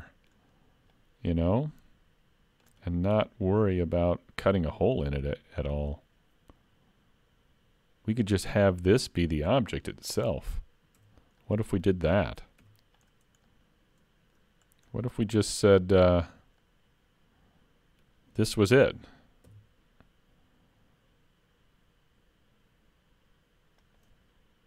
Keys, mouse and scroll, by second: 1.0 click, 2.9 middle click, 4.5 middle click, 5.7 click, 8.4 middle click, 11.0 Tab, 11.4 middle click, 12.6 3, 13.0 click, 13.5 middle click, 14.6-15.3 scroll up 3, 14.9 middle click, 16.6 middle click, 19.5 i.